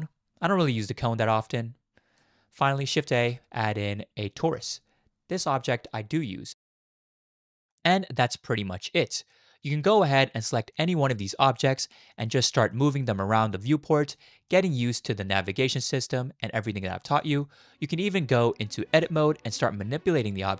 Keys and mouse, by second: 0.4 click, 3.1 shift+a, 6.6 click, 7.2 shift+click, 7.7-9.0 middle drag, 9.3-9.7 shift+middle drag, 10.7-11.8 middle drag, 12.7-13.0 middle drag, 13.6 click, 14.5 shift+middle drag, 14.8-17.2 middle drag, 17.4 shift+middle drag, 18.7 click, 18.9 Tab.